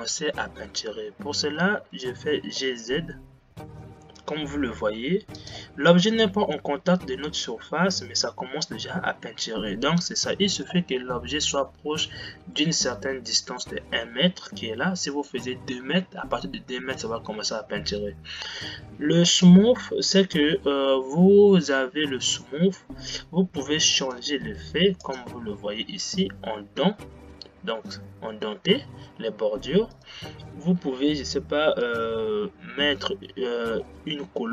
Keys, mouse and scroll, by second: 2.3 g, 6.3-9.4 middle drag, 25.5 click.